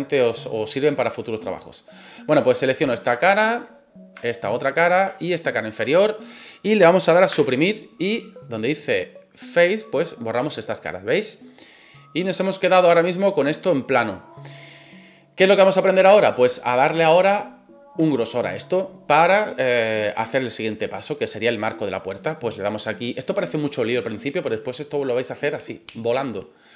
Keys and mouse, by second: 2.7 right click, 3.3 shift+middle click, 3.7 middle click, 4.3 shift+right click, 4.6 middle click, 5.4 shift+right click, 5.7-6.8 middle drag, 7.3 Delete, 10.2 middle click, 12.3 click, 13.7-14.7 middle drag.